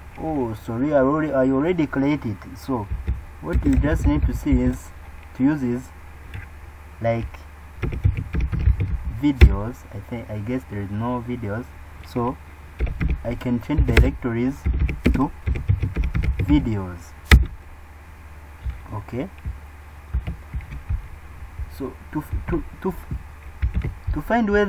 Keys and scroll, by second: 20.1 super+e, 23.7 super+Up.